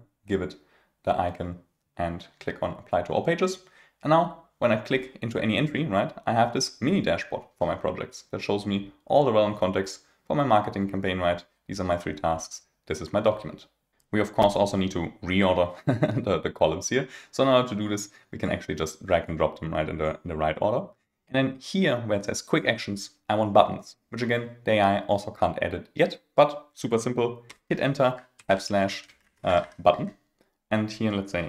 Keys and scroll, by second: 27.4 Return, 31.1 Return.